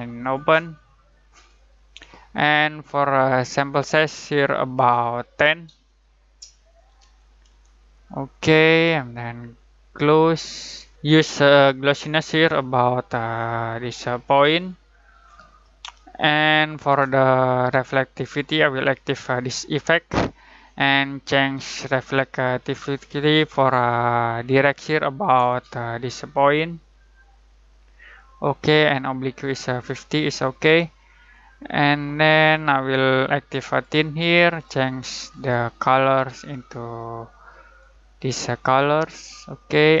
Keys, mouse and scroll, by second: 6.0 click, 6.8-7.9 typing, 7.9 click, 10.2 click, 12.7-18.2 drag, 18.5-21.7 drag, 25.4-31.3 drag, 31.3-40.0 drag.